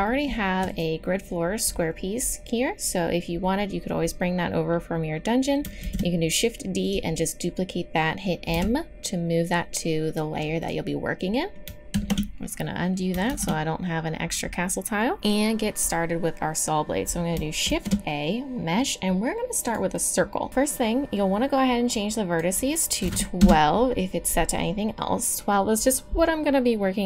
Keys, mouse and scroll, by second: 0.7-2.7 middle drag, 5.8 shift+d, 8.5 m, 10.6-12.3 drag, 12.3 ctrl+z, 13.5 ctrl+z, 17.6 shift+a, 20.5-23.3 drag.